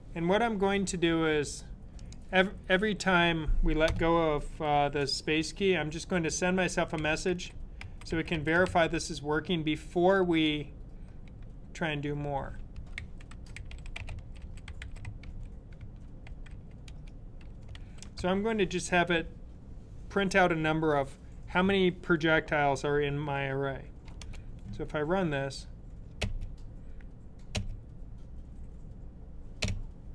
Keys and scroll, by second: 6.8-8.9 typing, 12.4-17.7 typing, 20.1 typing.